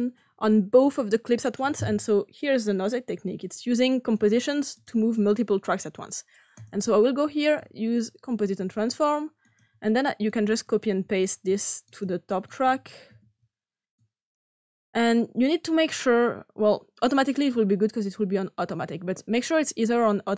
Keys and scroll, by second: 7.5 c, 11.0 ctrl+c, 13.0 ctrl+v.